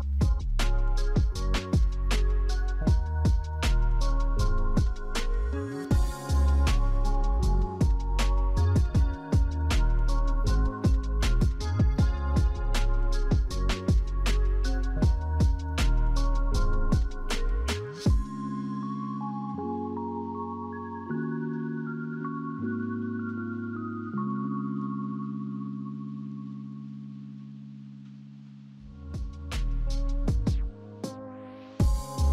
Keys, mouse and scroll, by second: 2.2-3.3 typing, 15.6-16.6 typing, 17.9 Return, 17.9 1, 20.3-21.7 typing, 29.5 scroll up 2, 30.1 middle click, 30.8-32.3 scroll down 2.